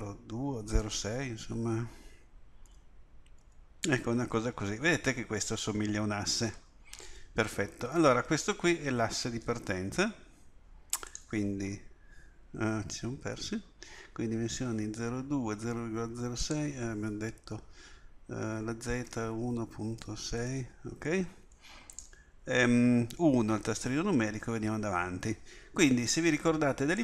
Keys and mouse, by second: 16.4-23.1 drag, 23.2 KP_1.